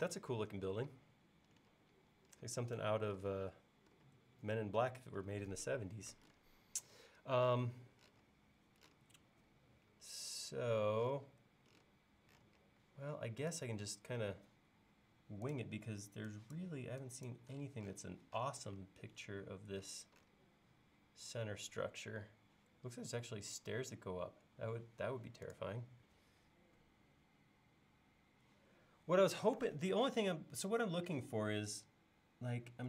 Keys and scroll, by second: 24.2 Escape.